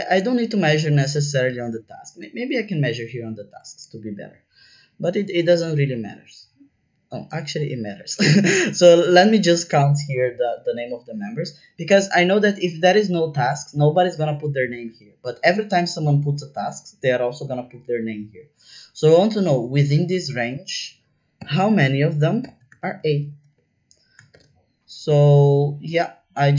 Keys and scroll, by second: 21.3-24.3 typing.